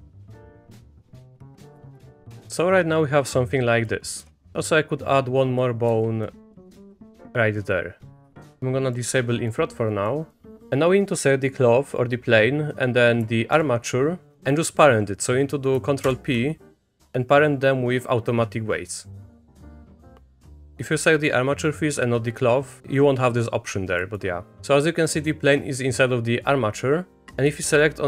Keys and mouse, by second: 0.1 click, 0.4 middle click, 0.9 e, 1.4 click, 1.5 Tab, 1.7 click, 4.1 shift+click, 4.5 click, 5.1 click, 5.9 e, 7.3 click, 8.4 Tab, 8.9 click, 10.0 middle click, 13.5 ctrl+click, 16.0 ctrl+p, 20.0-20.4 drag, 24.1 middle click, 27.3 click.